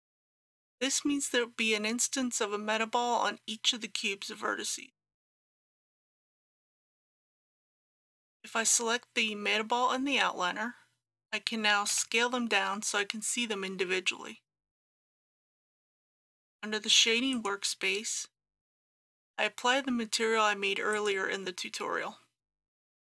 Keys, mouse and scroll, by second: 11.9 s, 15.6 click.